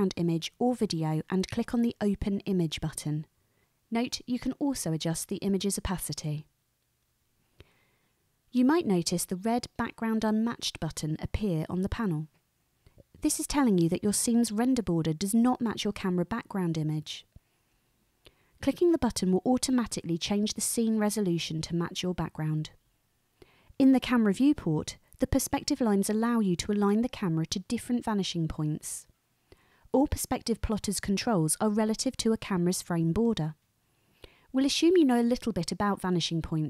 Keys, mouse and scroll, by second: 7.0-8.3 drag, 20.2 click, 26.6 click, 30.0 click.